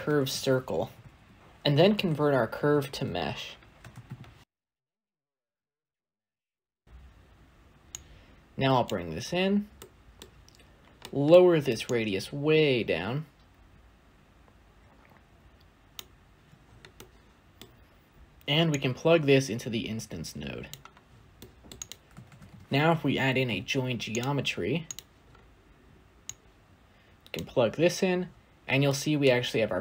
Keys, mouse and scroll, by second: 5.2 click, 11.9-15.2 shift+drag, 20.6 click, 24.1 shift+a, 27.3 click, 28.1-28.8 scroll down 2, 28.8-29.8 shift+middle drag.